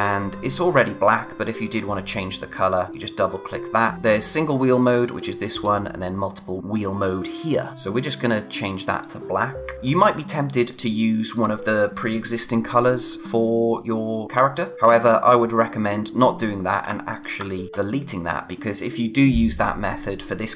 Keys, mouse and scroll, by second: 4.8 click, 7.7 click, 9.8 click, 16.8 shift+Num_Lock, 17.1 shift+click.